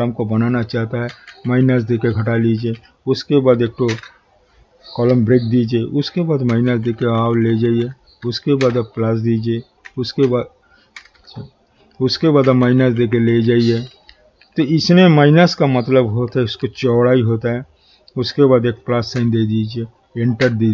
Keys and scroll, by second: 1.1 shift+-, 3.9 shift+=, 8.6 shift+=, 19.1 shift+=.